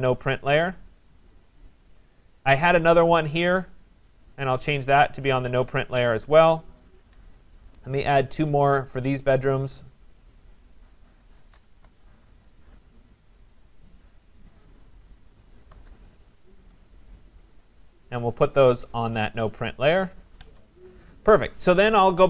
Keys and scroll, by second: 6.9 Escape, 11.8 Return, 20.4 Escape.